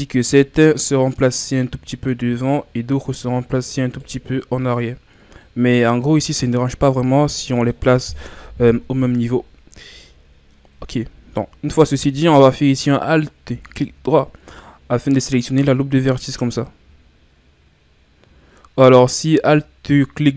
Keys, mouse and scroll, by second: 0.3-1.9 right drag, 1.9-3.3 drag, 3.3-3.9 ctrl+scroll down 3, 3.9-5.5 right drag, 5.5-7.3 drag, 7.3 scroll down 2, 7.6 middle click, 8.4 KP_1, 9.7-10.8 ctrl+scroll up 4, 10.8-13.2 ctrl+scroll up 4, 13.2-14.2 alt+right drag, 14.2-16.7 ctrl+scroll up 3, 19.2-20.3 right drag.